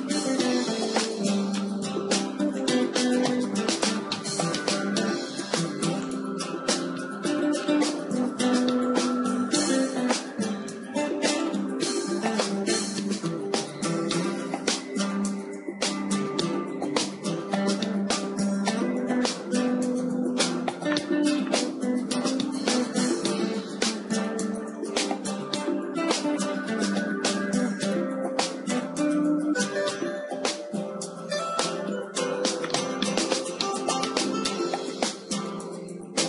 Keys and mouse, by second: 0.1 middle click, 0.9-2.5 middle drag, 2.5-4.2 drag, 4.2 Tab, 5.3 ctrl+r, 7.6-9.5 drag, 8.3 ctrl+r, 10.2-12.1 drag, 10.9 ctrl+r, 14.9-16.9 drag, 15.8 ctrl+r, 19.1-21.1 drag, 21.1-25.2 middle drag, 25.2 ctrl+r, 29.0 click, 29.4 ctrl+z, 30.9 Tab, 32.5-33.6 middle drag, 33.6-36.2 right drag.